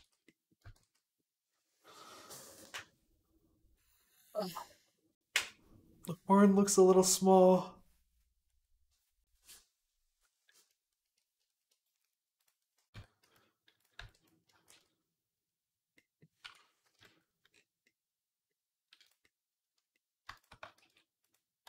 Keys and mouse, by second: 0.6 ctrl+s, 10.8-12.2 shift+middle drag, 12.2 click, 12.3 middle click, 12.6 middle click, 12.8 Tab, 13.1 z, 13.8 b, 14.5 shift+s, 16.8 KP_Decimal, 17.7-19.1 drag, 19.1 click, 20.1-21.6 shift+middle drag, 20.6 shift+s, 21.5 Tab.